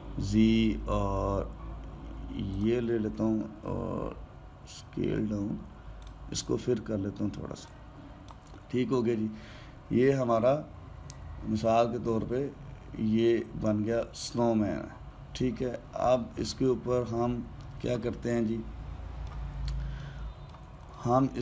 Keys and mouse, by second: 3.9 s, 8.4 click, 9.8-12.8 middle drag, 18.9-21.4 ctrl+middle drag.